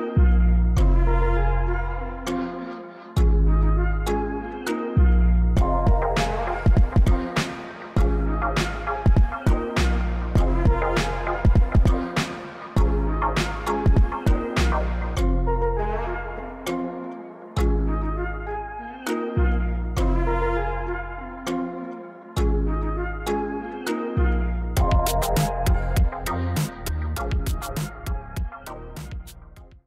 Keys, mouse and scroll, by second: 1.8 click, 3.1 drag, 8.8 middle click, 10.3 drag, 11.2 click, 16.8 middle click, 17.4 right click, 17.6 middle click, 18.3 drag, 19.2 drag, 21.5-21.8 middle drag, 22.4 click, 22.7-23.2 middle drag, 23.7-24.7 drag, 24.9-26.4 middle drag, 27.0-28.3 drag, 28.4-29.8 middle drag.